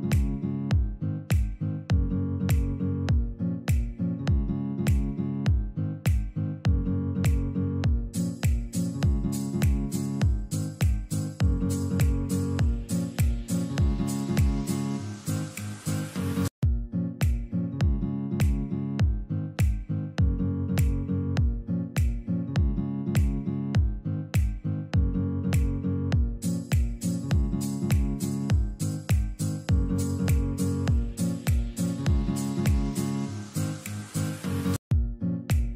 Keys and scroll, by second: 0.7 2, 1.2 Return, 3.5 ctrl+Page_Down, 5.1 Escape, 5.8 F3, 6.4 Escape, 10.6 Escape, 10.8 F2, 20.4 5, 27.8 space.